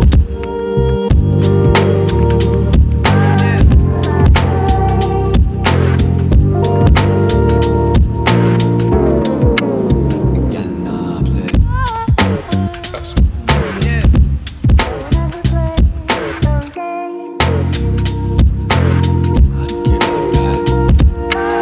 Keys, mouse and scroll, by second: 0.8 click, 1.9 x, 3.8 alt+click, 4.7-6.1 drag, 7.7 g, 8.0 right click, 8.5 Tab, 9.6 click, 12.8-13.7 drag, 14.6 click, 15.7 alt+z, 16.3 KP_1, 16.6 KP_Decimal, 17.1 click, 17.8 click, 18.5 click, 18.7 click, 18.8 click, 19.5 click, 19.6 click.